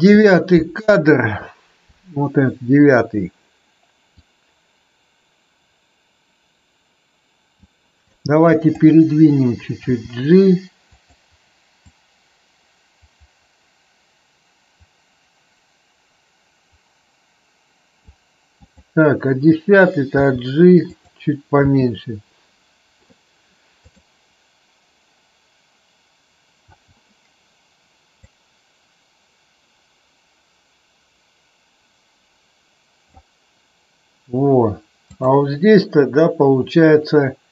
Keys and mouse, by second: 4.2-7.6 drag, 7.9-8.7 drag, 9.8 g, 10.9 click, 11.9-18.1 drag, 18.5 click, 20.1 g, 20.9 click, 21.6 space, 26.7 space, 28.2-33.1 drag.